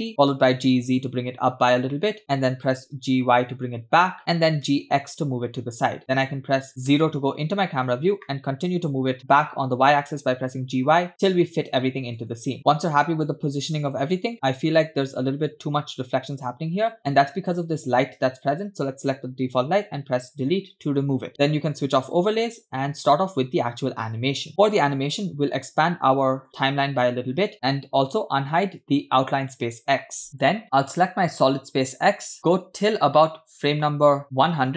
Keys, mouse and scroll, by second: 0.4 g, 2.9 g, 4.8 g, 7.0 KP_0, 8.7 g, 13.8 click, 17.5 click, 19.9 Delete, 21.8-22.9 drag, 24.5 click, 26.5 click, 28.2 click, 31.4 click, 32.7-34.7 drag.